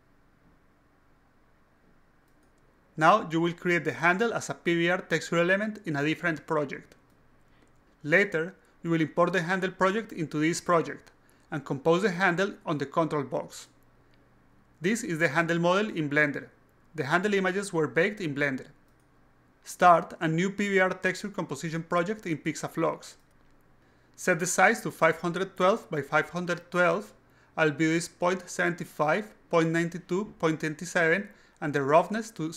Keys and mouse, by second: 0.0-2.8 typing, 14.0-15.9 ctrl+middle drag, 17.6-19.1 middle drag, 20.1 click, 21.2 click, 22.2 click, 27.6 click, 28.5 click, 28.7 click, 32.3 click.